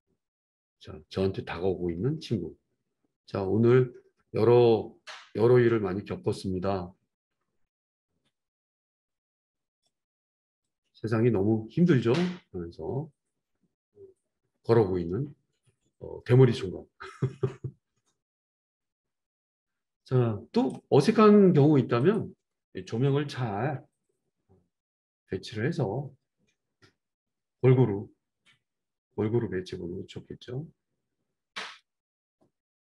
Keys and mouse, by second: 22.1-32.8 middle drag, 23.8 g.